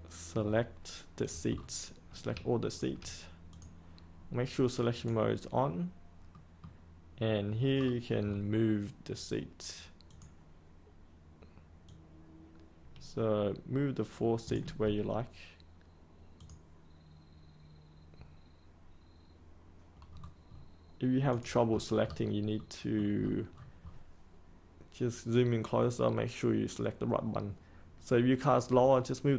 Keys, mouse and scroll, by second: 1.5-2.3 scroll down 1, 2.6 shift+click, 3.4 click, 6.3-7.5 middle drag, 7.7 scroll down 1, 8.2-9.1 scroll up 1, 10.0-14.6 drag, 20.1 scroll up 1, 21.3 click, 21.6-22.4 scroll up 1, 22.5 middle click, 23.1 scroll up 1, 25.3-29.3 drag.